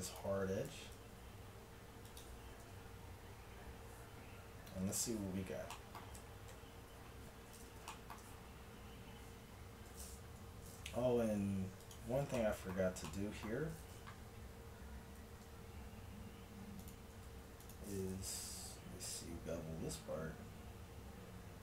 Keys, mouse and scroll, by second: 0.7 ctrl+b, 2.7 Tab, 6.6 KP_1, 10.3 Tab, 10.8-12.4 middle drag, 12.5 middle click, 13.4 middle click, 15.2 ctrl+r, 17.3 ctrl+r, 19.1 ctrl+b.